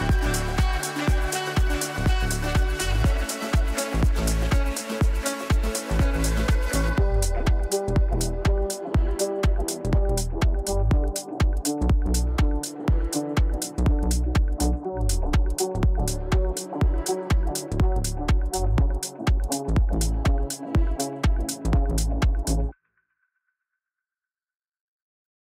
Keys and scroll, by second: 13.5 Delete.